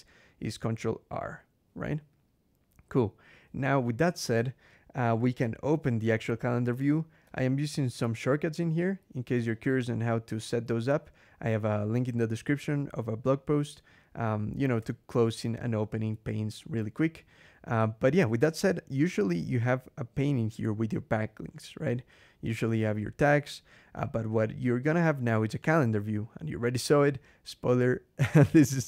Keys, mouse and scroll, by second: 0.4 ctrl+r, 7.1 ctrl+shift+h, 7.5 ctrl+shift+l, 7.8 ctrl+shift+h, 8.2 ctrl+shift+l, 9.4 ctrl+shift+h, 9.9 ctrl+shift+l, 11.2 ctrl+shift+h, 14.7 ctrl+shift+l, 15.2 ctrl+shift+h, 15.5 ctrl+shift+l, 15.9 ctrl+shift+h, 18.8 click, 25.4 click.